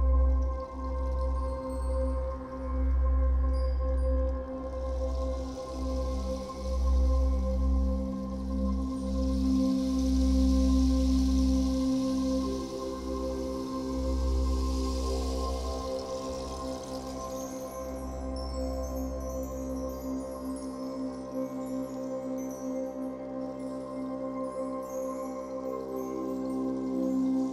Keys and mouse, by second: 0.0-0.7 drag, 3.0-3.9 ctrl+alt+drag, 8.8-9.7 drag, 11.8 typing, 13.1 typing, 13.5 click, 14.0 click, 14.4 typing, 14.5-16.3 drag, 16.3 space, 17.6-18.9 typing, 18.2 click, 18.6-20.8 drag, 20.8 space, 22.3-23.4 drag, 22.3 typing, 24.6-27.0 typing, 25.8-26.3 drag, 26.4 click.